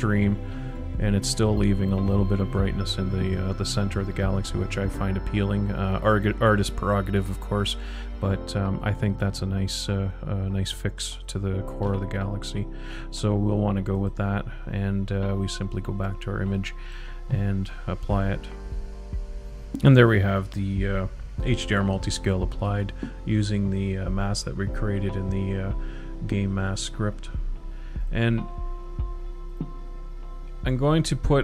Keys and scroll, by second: 3.4 ctrl+shift+z, 15.6 ctrl+shift+z.